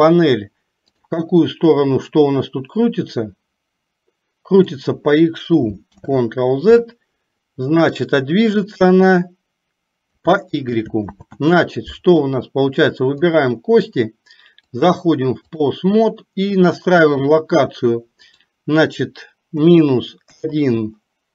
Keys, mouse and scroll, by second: 3.3 click, 3.6-4.9 drag, 8.9 click, 9.1-10.4 drag, 11.3 ctrl+z, 13.3 click, 15.0 click, 18.4-21.3 drag.